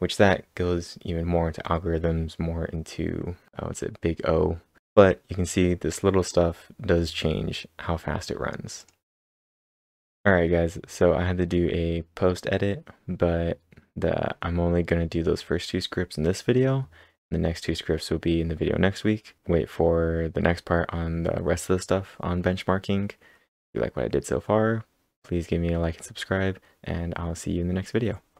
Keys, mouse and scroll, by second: 4.8 click, 5.6 scroll up 5, 6.1-8.0 scroll down 4, 8.3-9.6 scroll down 4, 8.8 click, 9.6-10.1 scroll up 5.